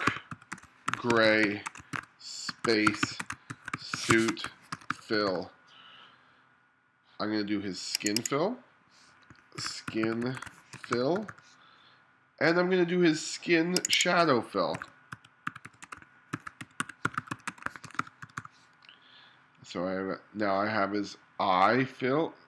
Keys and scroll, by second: 0.0-5.2 typing, 9.6-11.2 typing, 14.8-18.3 typing.